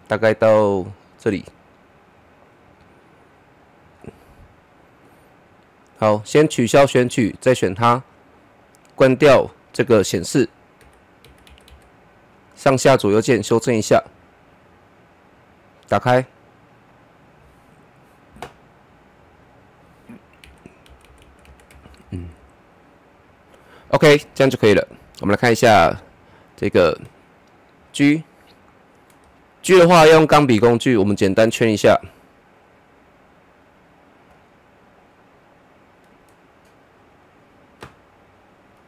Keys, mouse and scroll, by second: 6.3 click, 7.1 click, 14.5 click, 19.3 click, 20.4 Down, 25.3 click, 25.3 click, 27.4-27.8 scroll down 1, 27.8-30.1 middle drag, 30.1 click, 30.4 click, 33.2-33.6 scroll up 1, 34.3-35.9 middle drag, 35.9-38.8 drag.